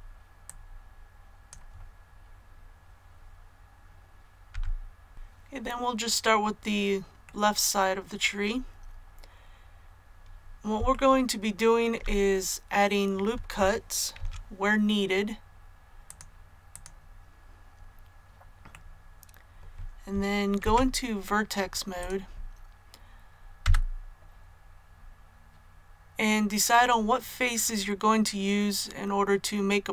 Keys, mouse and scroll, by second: 0.4-1.6 drag, 4.4 a, 5.1 click, 7.2 middle click, 8.9-9.4 scroll up 1, 10.9 shift+middle click, 15.4 ctrl+r, 16.0-17.7 drag, 18.6-19.7 middle drag, 20.5 Tab, 21.9 click, 23.5 a, 24.2-24.6 scroll up 1, 27.6-29.9 middle drag.